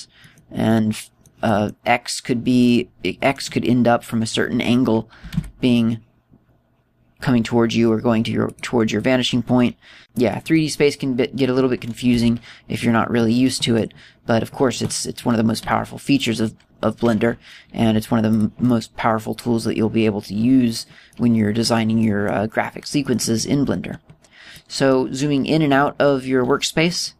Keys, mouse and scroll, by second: 0.2 middle click, 0.8 middle click, 1.3 middle click, 1.8 middle click, 2.5 middle click, 2.9 middle click, 6.3 g, 9.7 click, 10.9 middle click, 11.2 middle click, 11.6 middle click, 12.0-12.6 scroll up 1, 12.6-13.2 scroll up 2, 13.2 g, 13.9 click, 14.3 middle click, 14.7 middle click, 15.3-15.6 scroll down 2, 15.7-16.6 scroll up 10, 16.7 g, 17.3 click, 18.9 g, 19.5 click, 19.8 middle click, 22.2 middle click, 23.3 middle click, 23.7 middle click, 24.1 middle click, 24.4-25.6 scroll down 8, 25.6 middle click, 25.6-26.3 scroll down 2, 26.5-27.1 scroll up 13.